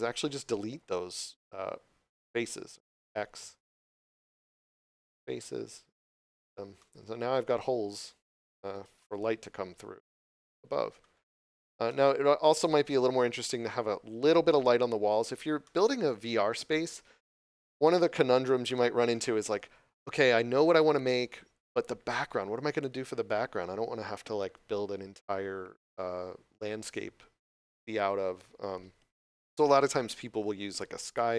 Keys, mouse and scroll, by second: 6.0 click, 6.7 middle click, 7.7 scroll down 1, 8.3 shift+middle click, 8.9 middle click, 11.4 scroll down 1, 11.8 middle click, 13.0 scroll down 1, 14.9 scroll up 1, 15.5 middle click, 17.1 shift+middle click, 17.7 shift+middle click.